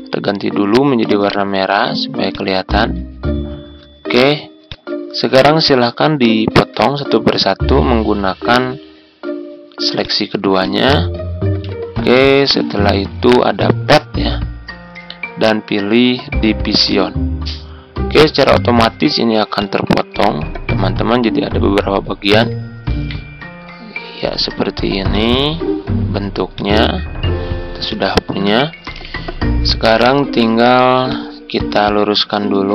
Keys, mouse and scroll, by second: 1.2 right click, 2.2-3.4 drag, 6.4-8.3 ctrl+scroll up 1, 9.9 shift+click, 10.5 click, 11.4 ctrl+z, 13.5 click, 18.7 ctrl+scroll down 1, 19.5-21.4 drag, 22.4 Delete, 24.2-25.0 ctrl+scroll up 1, 25.0-26.4 drag, 28.8 Tab, 30.2 ctrl+scroll down 1, 31.0 click, 32.5 e.